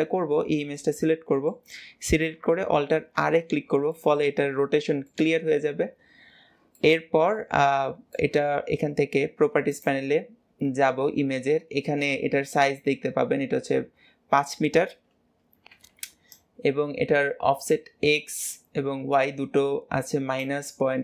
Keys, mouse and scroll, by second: 0.7-3.0 middle drag, 3.0 alt+r, 3.8-9.7 middle drag, 9.7 click.